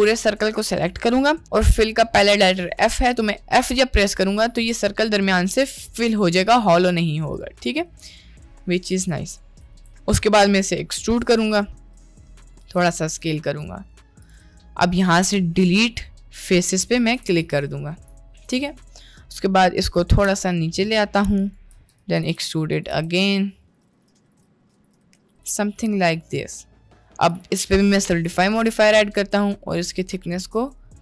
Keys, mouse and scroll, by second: 1.4 middle click, 3.8 f, 4.3 Tab, 4.7 middle click, 6.1 KP_Decimal, 9.1 click, 9.6 Tab, 11.9 e, 12.6 s, 14.6 middle click, 15.7 x, 17.0 1, 17.4 alt+click, 18.7 click, 20.4 g, 21.8-25.0 typing, 25.7 Tab, 26.6-27.0 middle drag, 27.4-28.7 drag, 29.8-30.8 drag.